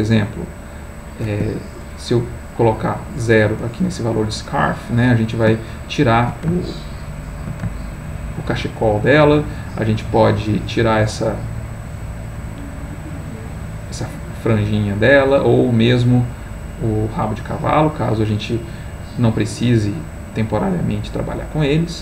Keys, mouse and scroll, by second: 0.5 click, 1.4 Escape, 2.5 click, 4.9-6.5 middle drag, 6.8 ctrl+middle click, 7.8-8.8 ctrl+middle drag, 12.2-14.8 drag, 15.3-20.5 drag, 20.9-22.0 middle drag.